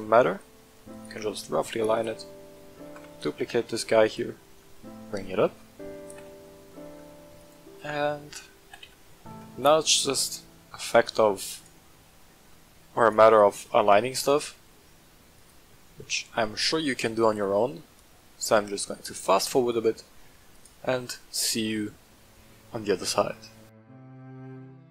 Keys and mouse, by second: 0.9 click, 1.9 right click, 2.8 shift+d, 3.1 right click, 3.3 g, 3.6 z, 4.0 click, 4.7-5.3 shift+middle drag, 6.0 g, 6.2 z, 7.3 click, 8.6 g, 8.8 z, 11.0 click, 11.5 right click, 12.5 shift+middle drag, 13.0 right click, 13.8 g, 14.1 z, 15.3 click, 16.5 shift+middle click, 17.2 g, 17.4 z, 19.6 click, 20.5 right click, 23.7 click, 23.7-24.9 typing, 23.8 shift+middle click, 24.0 click, 24.1 shift+middle click, 24.5 click.